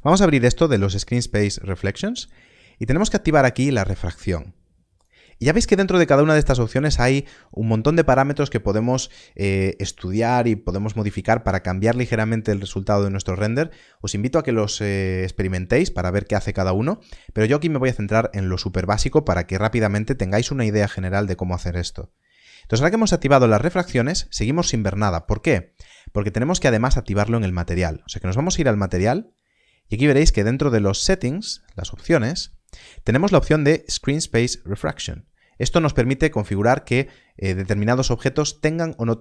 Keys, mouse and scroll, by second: 4.9 click, 25.1 click, 28.6 middle click, 31.0 click, 32.3 middle click.